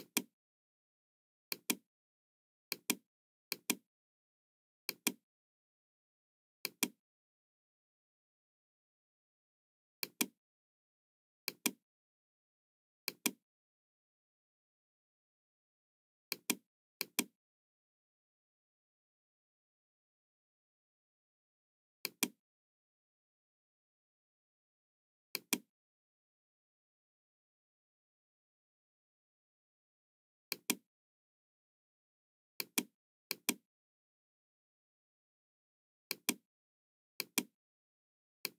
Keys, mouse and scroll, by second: 1.4 click, 2.7 click, 3.4 click, 4.8 click, 6.6 click, 9.9 click, 11.3 click, 13.0 click, 16.2 click, 16.9 click, 18.9 KP_1, 19.7 KP_0, 20.1 Return, 21.9 click, 23.0 Return, 23.0 KP_0, 23.9 Return, 25.2 click, 27.5 KP_5, 27.5 KP_8, 28.4 Return, 28.4 KP_5, 28.4 KP_8, 30.4 click, 31.5 Return, 32.5 click, 33.3 click, 36.0 Return, 36.0 click, 36.0 KP_5, 37.0 click, 38.4 click.